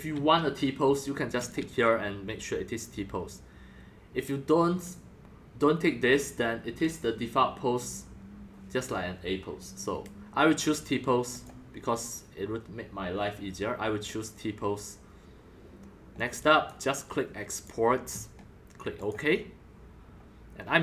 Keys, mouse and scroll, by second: 1.3 click, 2.7-5.1 drag, 6.1 click, 7.1-11.3 drag, 11.3-15.0 drag, 16.1 click, 17.1-17.6 drag, 18.2 click, 19.0 click.